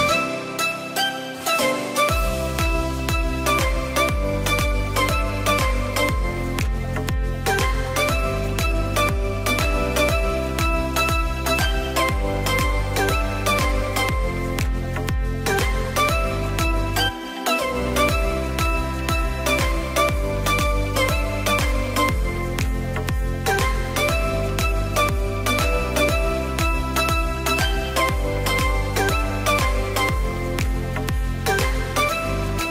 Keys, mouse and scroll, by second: 2.9-7.4 drag, 7.5 KP_3, 8.5-9.8 shift+middle drag, 9.8 drag, 12.3 drag, 15.2-17.8 drag, 17.9-19.2 scroll up 3, 19.2 click, 19.6-19.9 scroll down 1, 19.9-20.9 middle drag, 20.9-21.4 scroll down 2, 21.4 click, 22.4-23.9 middle drag, 23.9 click, 25.2-28.8 drag, 29.3-29.8 scroll up 1, 29.8-31.2 middle drag, 31.2-31.5 scroll down 2, 31.5-32.7 middle drag.